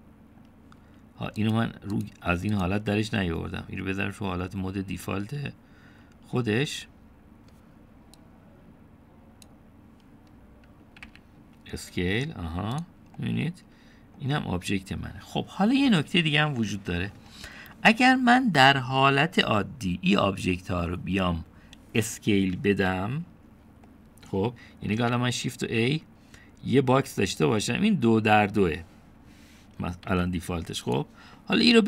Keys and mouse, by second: 0.7-1.5 drag, 2.4 click, 3.6-10.5 drag, 12.1 s, 14.2-15.2 drag, 17.5-18.2 middle drag, 24.9 middle click, 26.0 shift+a, 31.1 g.